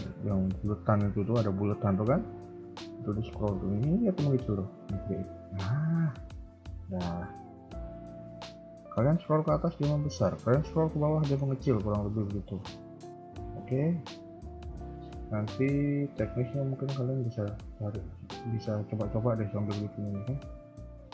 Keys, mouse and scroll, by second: 6.6 KP_1, 6.8-7.3 scroll down 4, 7.1 middle click, 7.8 KP_3, 8.0 KP_1, 8.5 middle click, 9.0 KP_3, 9.8 KP_1, 10.2 KP_3, 10.7 scroll up 2, 11.1 shift+middle click, 11.4 scroll up 1, 11.6 KP_3, 12.1 scroll down 3, 12.3 KP_1, 12.6 KP_3, 13.2 KP_1, 13.8-14.3 scroll down 1, 14.4 shift+middle click, 14.7 scroll up 1, 15.3-15.6 scroll up 1, 16.7 a, 16.8 a, 18.5 b, 19.6 scroll up 3, 20.4-20.7 scroll down 2, 20.7 shift+middle click.